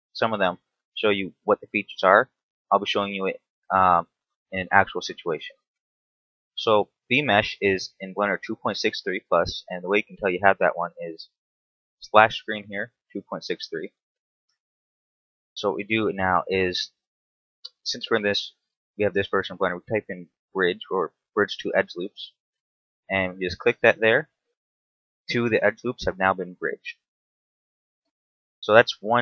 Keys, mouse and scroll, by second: 5.2 space, 10.2 click, 15.5 space, 24.0-24.5 scroll down 1, 24.5 middle click, 27.5 KP_7, 28.2 Tab, 28.6 scroll down 2, 29.0 shift+middle click.